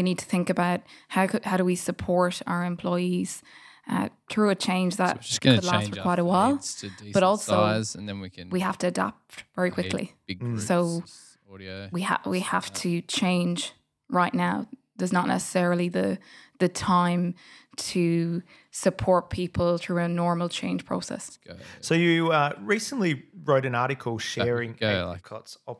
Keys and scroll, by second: 3.4 super+f, 5.4-6.3 typing, 8.5 typing, 11.6 Return, 13.4 f, 15.5 super+f, 18.3 f, 20.0 super+z, 20.4 super+f, 21.4 Tab, 22.3-25.7 typing.